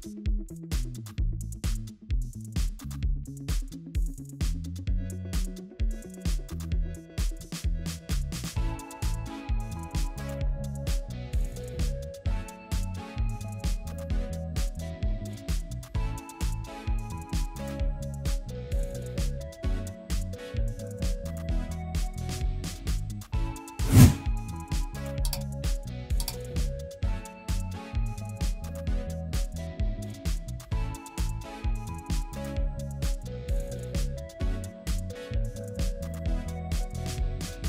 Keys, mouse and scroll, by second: 18.7 alt+click, 20.0 ctrl+z, 20.4 ctrl+z, 23.3 alt+click, 24.9 ctrl+z, 31.9 alt+click, 33.6 alt+click, 35.6 alt+click, 36.4 alt+click, 37.4 ctrl+z.